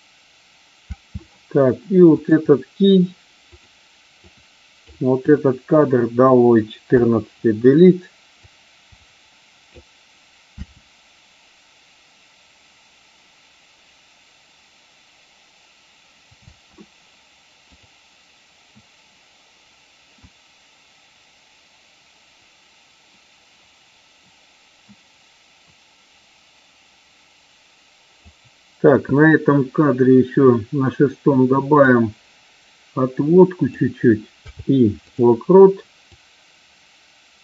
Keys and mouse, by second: 0.8 space, 2.0 click, 3.5 click, 4.2-4.8 drag, 5.2-5.8 drag, 6.8 BackSpace, 7.0 Delete, 8.3-9.8 drag, 10.5 space, 16.3 space, 17.6 click, 20.2-28.2 drag, 31.7-33.6 drag, 34.3 i, 36.0-37.4 drag.